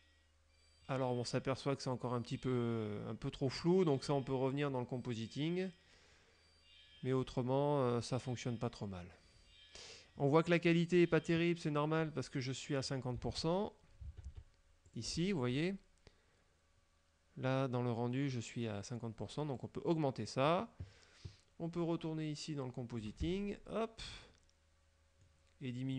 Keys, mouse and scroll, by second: 12.9 click, 13.4 alt+Tab, 14.2 alt+Tab, 14.9 alt+click, 24.9 click.